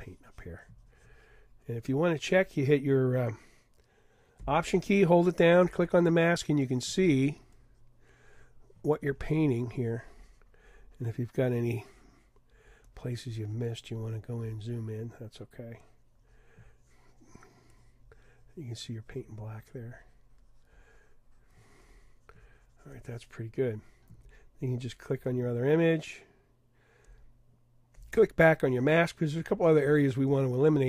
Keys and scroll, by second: 29.9 super+=.